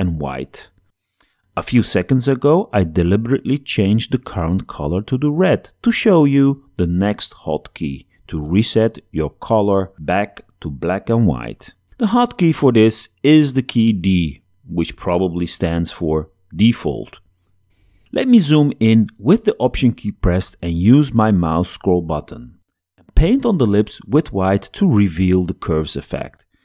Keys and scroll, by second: 12.4 d.